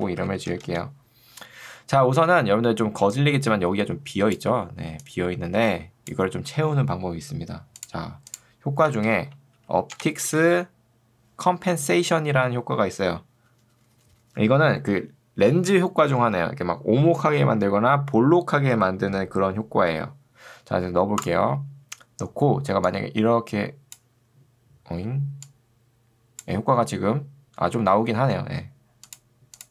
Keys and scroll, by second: 0.0-0.7 typing, 0.8 Return, 2.4 ctrl+2, 9.0 ctrl+space, 9.4-11.1 typing.